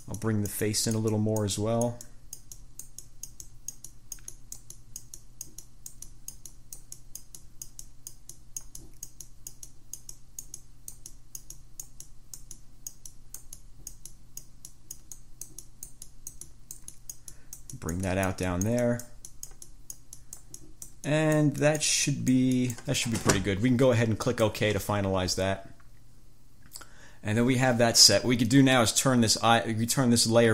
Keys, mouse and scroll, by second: 24.4 click.